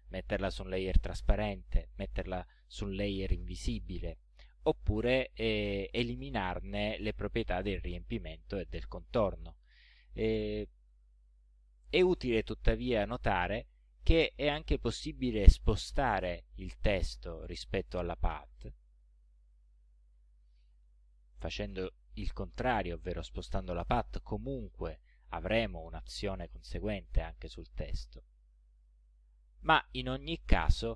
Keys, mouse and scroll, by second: 18.8-19.9 drag, 23.8 click, 28.8 click, 29.7-30.9 drag.